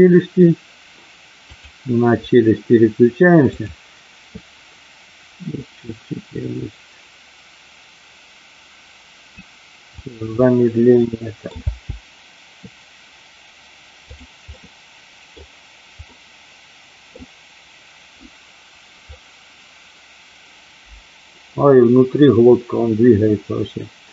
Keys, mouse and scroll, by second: 1.5 click, 3.5 click, 5.8-9.3 drag, 10.0 click, 11.0 middle click, 11.5 space, 14.0 click, 14.4 middle click, 16.0-17.1 middle drag.